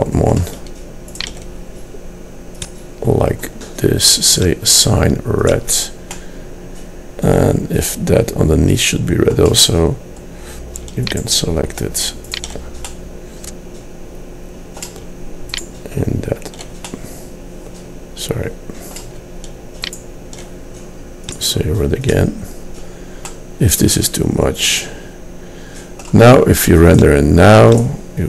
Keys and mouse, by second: 3.1-6.3 drag, 6.3 middle click, 11.2-13.3 drag, 14.1 middle click, 14.7 middle click, 18.6-20.0 middle drag, 23.4 middle click.